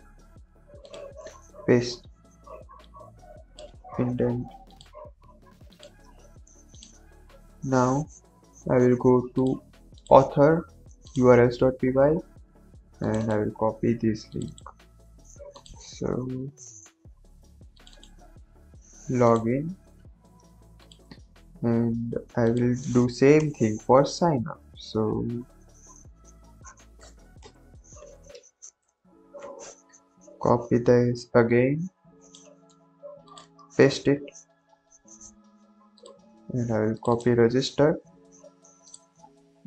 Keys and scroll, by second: 1.1 ctrl+v, 3.7 Tab, 6.0 Tab, 14.9 ctrl+c, 18.3 ctrl+v, 20.0 ctrl+s, 23.4 Return, 23.6 Right, 24.1 Right, 24.1 Right, 24.2 Right, 24.3 Right, 25.2 shift+Left, 26.9 BackSpace, 27.3 Return, 27.7 Up, 28.0 ctrl+v, 28.7 BackSpace, 32.6 ctrl+c, 33.5 ctrl+v, 37.9 ctrl+c.